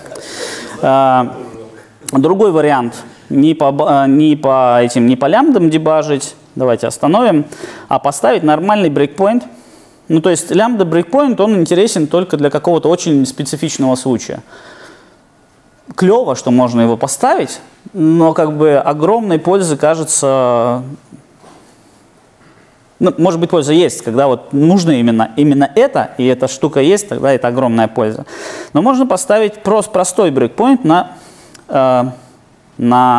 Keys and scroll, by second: 7.5 super+F2, 9.9 super+F8.